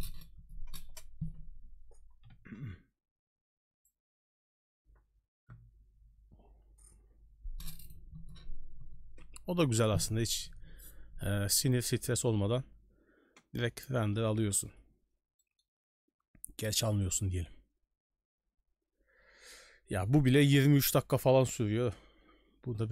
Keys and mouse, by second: 15.4 middle click.